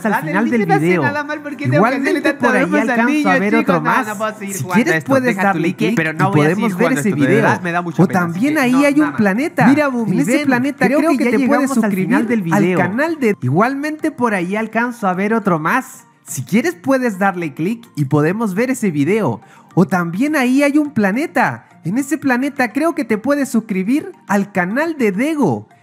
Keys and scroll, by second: 13.2 space.